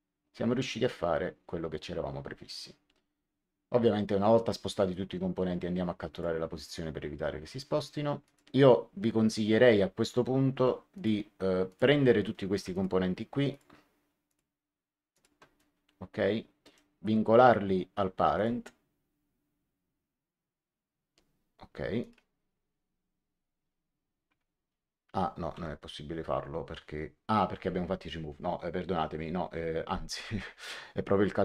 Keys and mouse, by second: 6.0 click, 8.2 click, 10.9 click, 12.6 click, 16.5 right click, 18.3 click, 21.9 click, 25.3 ctrl+z.